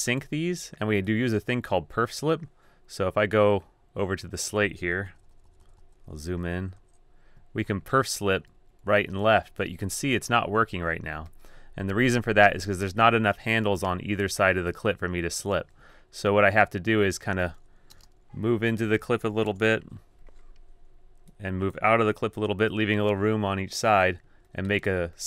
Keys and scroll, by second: 5.2 super+], 5.5 super+], 5.7 super+], 5.8 super+], 6.6 super+], 6.7 Right, 6.8 typing, 7.9-11.8 typing, 15.6 d, 18.6-19.5 typing, 22.5 o.